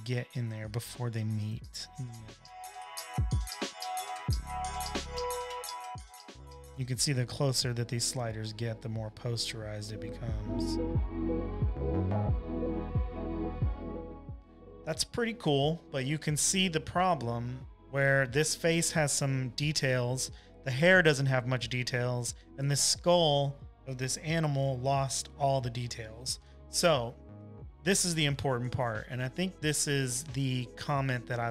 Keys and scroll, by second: 15.9 v, 16.1 space, 16.6 space, 16.7 space, 28.8 BackSpace.